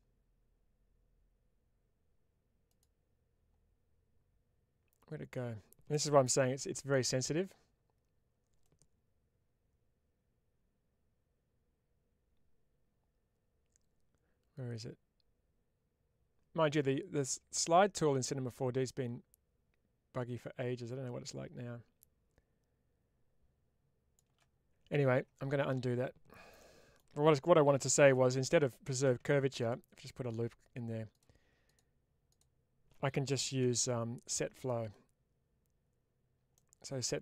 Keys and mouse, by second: 6.8 middle click, 9.0-24.2 shift+drag, 26.5 middle click, 29.9 click, 36.5-37.2 middle drag.